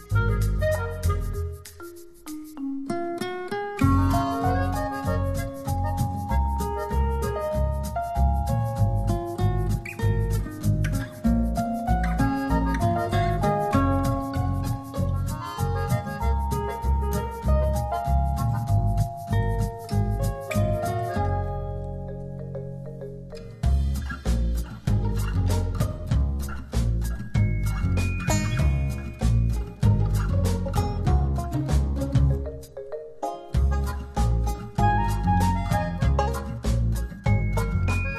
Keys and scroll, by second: 1.9 s, 2.9 ], 9.9 super+0, 11.3 z, 13.0 v, 21.4 super+t, 22.0 alt+super+t, 33.4 shift+Up, 36.3 shift+Return, 37.7 shift+z.